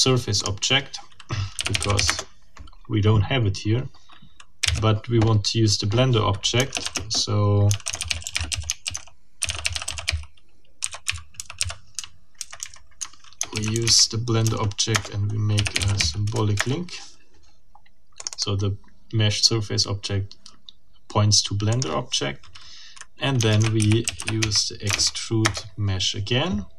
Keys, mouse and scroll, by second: 0.4 click, 1.3-2.3 typing, 4.6 l, 6.5-12.1 typing, 12.4 Left, 13.3-16.3 typing, 14.9 Return, 16.6 ctrl+shift+Return, 18.2 click, 21.7 click, 23.3-24.8 typing, 25.4 Return.